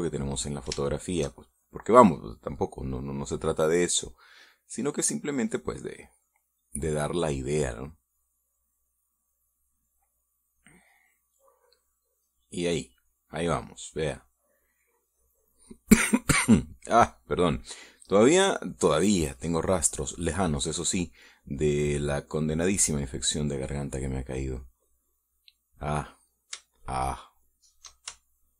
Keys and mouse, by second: 1.7 shift+middle click, 3.4 middle click, 6.2-7.6 drag, 9.4-11.9 drag, 12.0 click, 12.5 click, 13.4 click, 15.0-16.8 drag, 18.0-20.2 drag, 20.8-22.2 drag, 22.4-24.1 drag, 25.4-26.8 drag, 27.6-28.5 shift+middle drag.